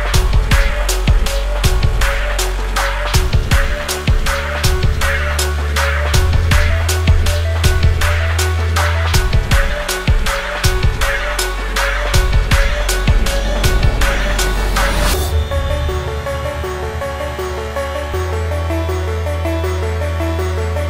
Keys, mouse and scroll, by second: 8.2 Left, 8.5 click, 8.7 click, 9.3-10.3 drag, 9.6 Left, 10.5 click, 10.7 click, 11.0 click, 11.5 click, 11.8 click, 12.3 click, 13.5 click, 14.3 click, 14.6 click, 14.9 click, 15.4 click, 16.4 click, 16.7 click, 16.9 click, 17.2 click, 17.9 click, 18.1 click, 18.5 click, 19.0 click, 19.7 click, 20.0 click, 20.5 click.